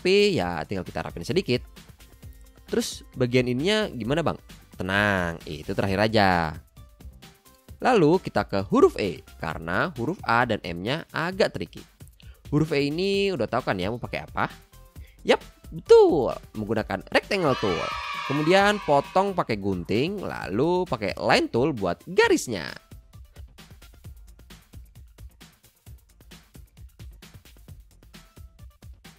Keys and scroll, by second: 0.0 a, 0.8 Down, 15.7 m, 22.5 c, 23.6 a, 24.4 BackSpace, 26.8 \.